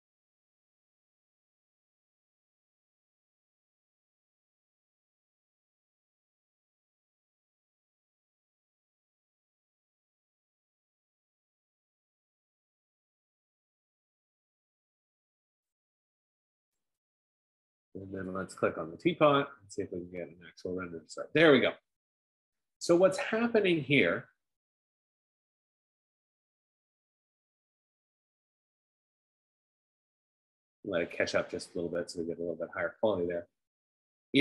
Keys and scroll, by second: 17.6 F15.